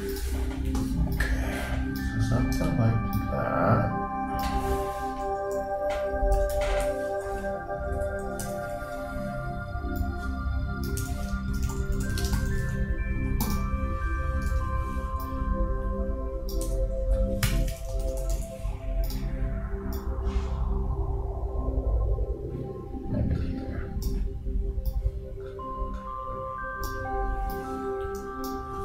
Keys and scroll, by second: 11.3 shift+Return, 11.5 shift+s, 12.3 shift+space, 12.4 shift+a, 14.5 super+d, 17.9 shift+BackSpace, 18.0 shift+n.